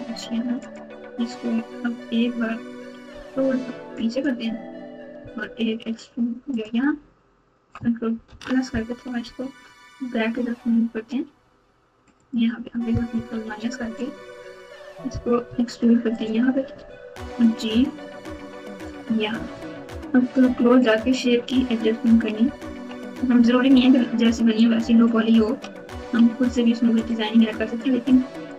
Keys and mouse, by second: 3.1 g, 5.2 e, 8.2 ctrl+KP_Add, 9.2 g, 13.3 ctrl+KP_Subtract, 15.4 e, 16.7 g, 21.7 ctrl+KP_2, 22.4 ctrl+KP_2, 22.4 ctrl+KP_6, 22.9 ctrl+KP_6, 24.5 click, 24.7 click, 25.9 g, 28.1 click.